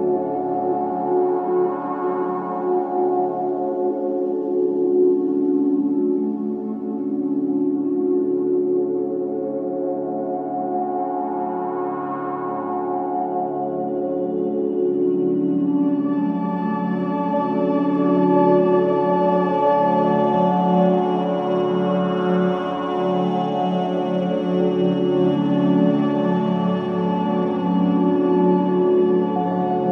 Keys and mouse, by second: 0.6-2.0 middle drag, 3.9-5.9 drag, 5.8 KP_1, 6.3-8.4 middle drag, 7.2 z, 10.4-13.0 drag, 13.0 middle click, 14.3 shift+a, 24.6 g, 26.1-29.5 drag, 26.4 s, 29.5 g.